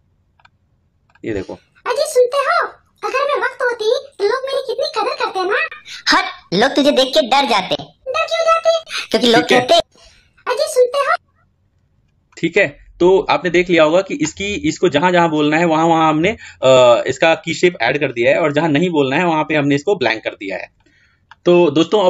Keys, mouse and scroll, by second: 0.4-9.6 drag, 11.0-20.4 drag, 20.6-22.0 drag.